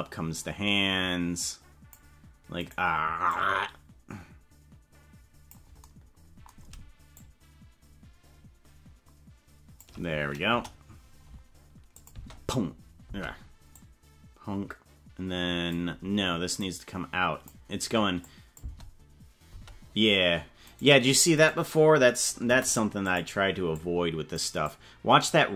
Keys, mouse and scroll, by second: 2.7 right click, 3.2-5.5 drag, 7.1-9.9 shift+drag, 10.4 KP_0, 11.9 click, 12.1 space, 13.1 space, 13.7-15.7 drag, 16.5-17.5 drag, 18.3 click, 18.5 space, 19.5 space, 20.6 right click, 21.3 right click, 22.4 Delete, 23.7 click, 24.7-25.5 drag.